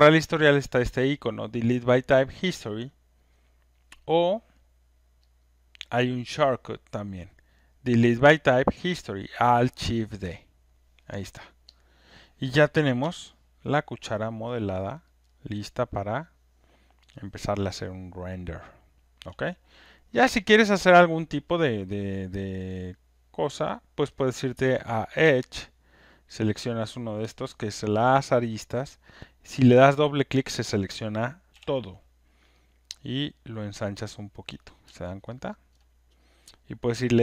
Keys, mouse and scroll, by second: 3.6-4.9 drag, 5.4 click, 11.8 click, 13.9 alt+click, 14.4 alt+middle click, 15.0 alt+right click, 15.4 alt+middle click, 18.8 alt+scroll, 19.3 click, 20.0 click, 20.6 alt+right click, 20.9 alt+click, 22.9 right click, 25.1 right click, 26.4 click, 27.8 alt+middle click, 28.3 alt+right click, 29.0 click, 29.1 click, 30.2 alt+scroll up 1, 31.5 click, 34.4 click, 34.8 r, 35.3 alt+right click, 35.7 click.